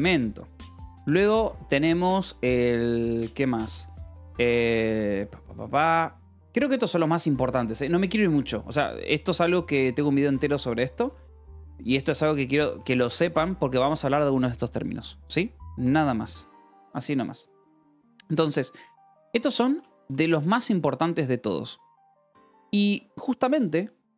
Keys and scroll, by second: 0.0-0.8 typing, 0.0 Escape, 8.1 Escape, 9.6 j, 10.0 d, 10.1 Escape, 10.6 d, 11.1 Escape, 11.9-13.2 typing, 13.7 Escape, 18.7-19.9 typing, 21.5 Escape, 22.1 j, 22.4 k.